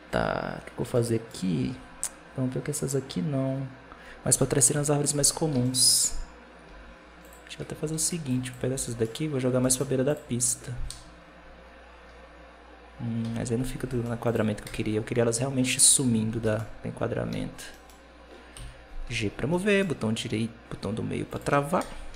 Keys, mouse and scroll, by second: 0.8-3.9 shift+middle drag, 4.6 KP_7, 5.1-5.5 scroll down 1, 5.5-6.5 shift+middle drag, 6.5 g, 7.7 alt+a, 8.0 b, 8.6 b, 9.2 scroll up 1, 9.4 g, 10.8 KP_0, 11.9-13.1 scroll down 3, 13.1 KP_7, 13.6 g, 14.5 KP_0, 15.7 KP_7, 16.2 g, 17.6 middle click, 18.4 KP_7, 18.9 g, 21.6 KP_0, 22.0 alt+a.